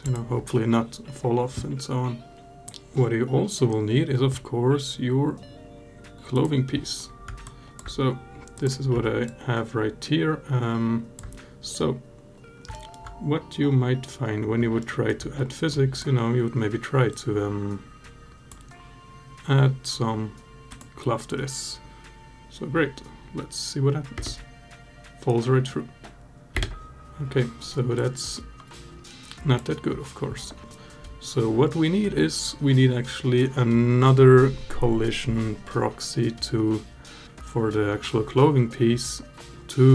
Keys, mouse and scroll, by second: 2.3 drag, 6.1 click, 7.2-7.6 alt+drag, 8.3 click, 9.0-11.0 alt+drag, 12.5 alt+middle drag, 14.6 alt+middle drag, 20.5 click, 23.9 space, 26.4 space, 27.8-29.4 drag.